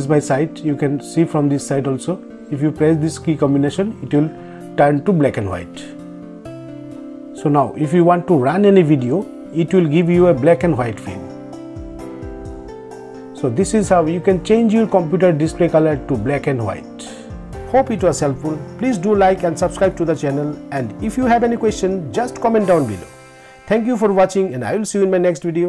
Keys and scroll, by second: 5.0 ctrl+Tab, 9.4 ctrl+Tab, 14.7 ctrl+Tab.